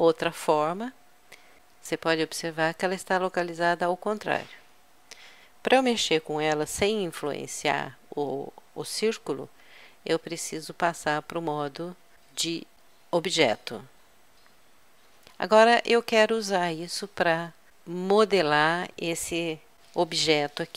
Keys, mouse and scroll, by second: 0.2-1.6 middle drag, 1.6 ctrl+z, 10.3 Tab, 20.7 KP_Subtract.